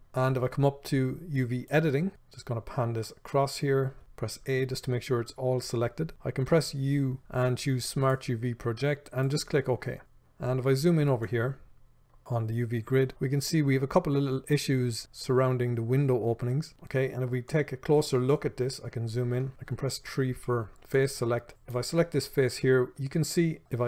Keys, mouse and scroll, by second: 2.1 shift+middle click, 17.7 middle click, 21.5 middle click.